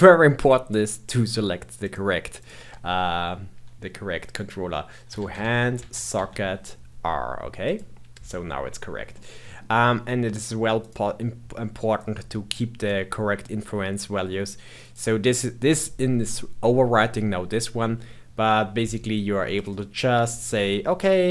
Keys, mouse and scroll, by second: 2.3-5.5 drag, 9.1-10.7 middle drag, 10.7-17.8 drag, 19.5-19.8 drag, 19.8-21.3 scroll down 5.